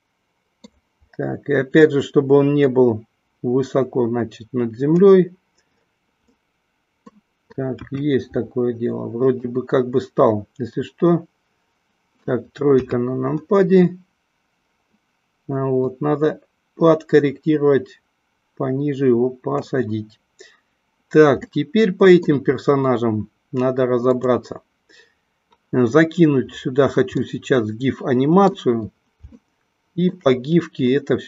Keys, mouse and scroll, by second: 2.6-5.0 drag, 6.4 scroll up 1, 6.5 middle click, 7.7 KP_1, 9.4-9.7 scroll up 1, 9.7-12.2 middle drag, 12.9 KP_1, 15.9-19.6 drag, 21.5-22.4 middle drag, 27.2-28.6 middle drag, 29.4-30.1 shift+middle drag, 31.0 middle click.